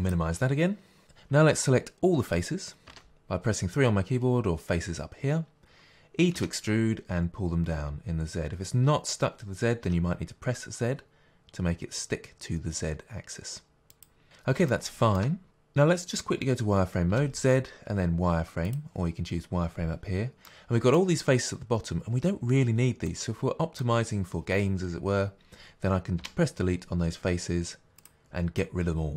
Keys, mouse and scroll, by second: 0.0 click, 2.8 3, 6.3 e, 14.0 click, 14.6-29.1 shift+middle drag, 17.0 z, 26.2 Delete.